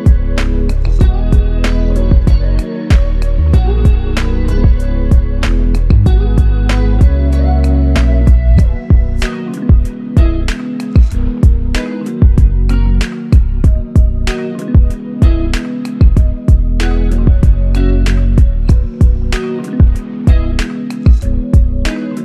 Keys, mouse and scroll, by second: 4.3 alt+click, 9.9 shift+click, 13.4 alt+click, 15.9 shift+click, 19.3 c, 21.1 double click.